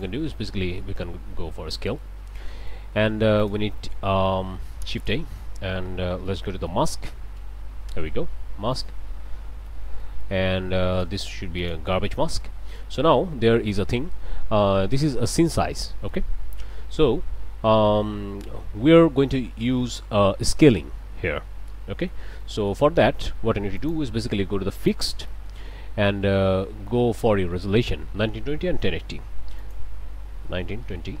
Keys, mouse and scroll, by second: 1.1-1.6 scroll up 1, 1.8 click, 2.5 click, 3.4 click, 4.6 shift+a, 5.0 shift+click, 6.3 m, 6.3 a, 6.5 s, 6.7 k, 7.4 Return, 8.7 click, 9.6 ctrl+s, 9.9 ctrl+middle click, 9.9 ctrl+scroll up 2, 10.1 ctrl+click, 10.9 click, 11.6 click, 12.4 click, 13.0-13.5 scroll up 2, 15.9 click, 16.4 middle click, 19.2 click, 21.3 click, 22.4 click, 23.8 click, 24.8 click, 25.3 click, 29.6 click, 30.5-31.2 typing.